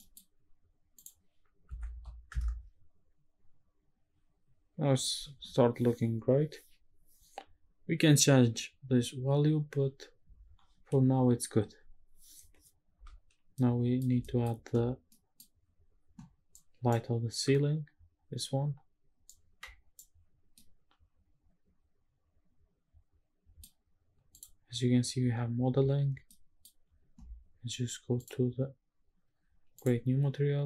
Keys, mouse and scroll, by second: 0.0 middle click, 1.0-2.3 drag, 1.9 KP_0, 10.0-11.5 scroll down 1, 11.5-12.1 scroll down 1, 13.5-14.0 middle drag, 14.2 shift+middle click, 14.9 middle click, 14.9 scroll down 1, 19.5 middle click, 19.6-20.5 scroll down 1, 20.5-21.6 middle drag, 22.2-23.7 middle drag, 24.3 click, 26.3 middle click, 28.2 click, 29.8 click.